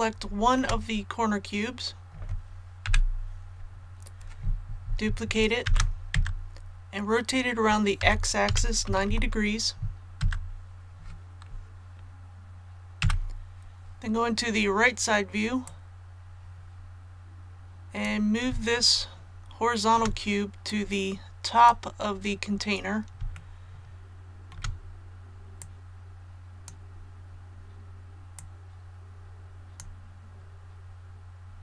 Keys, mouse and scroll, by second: 0.0 shift+middle click, 5.6 shift+d, 8.0 r, 8.5 x, 8.9 KP_9, 9.1 KP_0, 13.0 KP_3, 15.6-18.0 drag, 18.7 shift+middle click, 20.7 click, 22.1-22.4 scroll up 1, 23.3 shift+middle click, 24.3 scroll up 2, 25.6-31.6 drag.